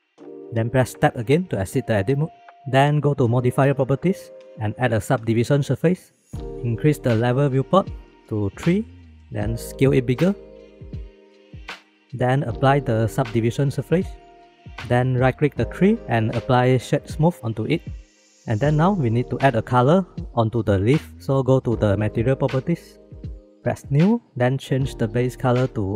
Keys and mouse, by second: 1.4 Tab, 5.0-6.1 drag, 8.0 click, 8.5 click, 10.1 s, 11.6 click, 13.6-14.2 drag, 15.9 click, 23.9 click, 25.1 click.